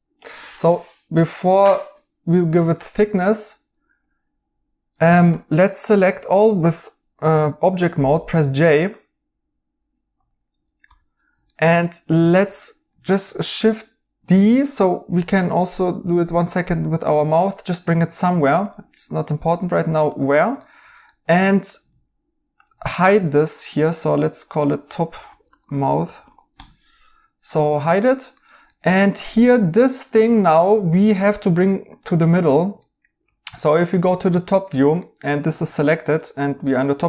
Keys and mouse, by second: 0.6 right click, 2.7 right click, 5.0 Tab, 10.8 j, 11.4 right click, 14.2 d, 18.9 right click, 20.5 right click, 24.8-26.5 typing, 26.5 Return, 28.3 right click, 32.8 right click, 36.6 right click.